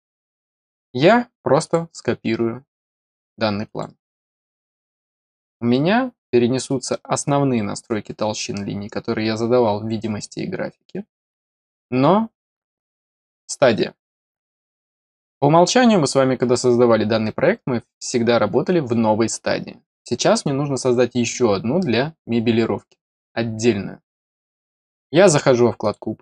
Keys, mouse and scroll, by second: 0.5 right click, 1.6 click, 3.6 click, 4.8-5.2 scroll up 2, 5.7 middle click, 25.8 click.